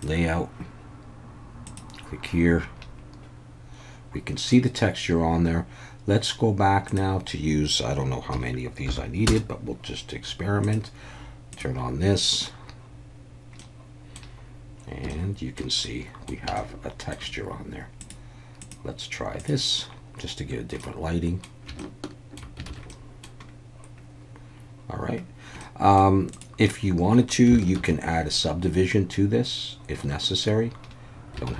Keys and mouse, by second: 0.0 click, 1.7 click, 6.9-9.7 drag, 10.6 click, 11.5 click, 13.6-14.2 middle drag, 15.1-15.6 alt+middle drag, 15.8-16.3 middle drag, 16.6-17.1 shift+middle drag, 18.0-19.9 drag, 20.8-21.5 middle drag, 21.8-22.4 shift+middle drag, 22.7 alt+a, 22.9 middle click, 25.6 middle click, 26.3 click, 27.8 ctrl+1, 31.5 alt+a.